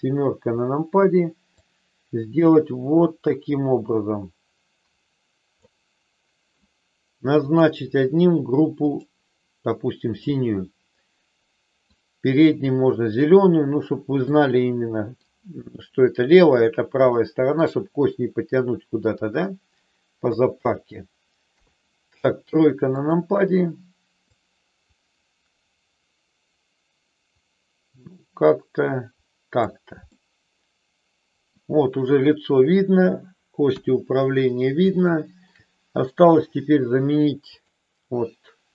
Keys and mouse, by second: 1.6-5.7 drag, 8.9 click, 10.2-11.9 middle drag, 14.3 middle click, 17.1 middle click, 18.6 middle click, 20.3 KP_1, 22.9 click, 24.3-29.6 drag, 29.9-31.6 middle drag, 33.7 KP_1, 34.9 shift+middle click, 37.6 click.